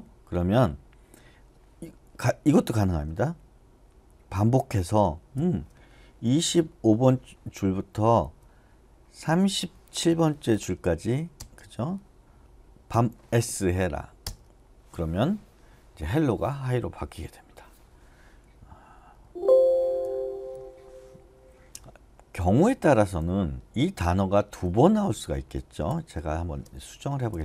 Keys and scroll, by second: 5.4-6.9 typing, 8.2 ,, 9.3-11.4 typing, 12.9 s, 14.2 Return, 19.2 Escape, 20.0 u, 22.1-27.4 typing.